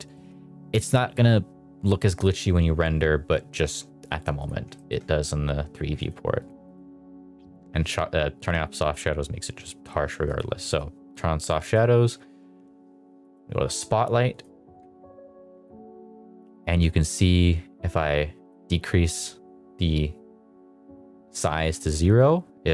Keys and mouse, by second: 0.1 shift+middle click, 4.6 shift+middle click, 5.9 click, 6.3 click, 6.6 click, 10.2 click, 10.6 click, 13.1 click, 14.2 click, 15.5 click, 16.8-18.5 drag.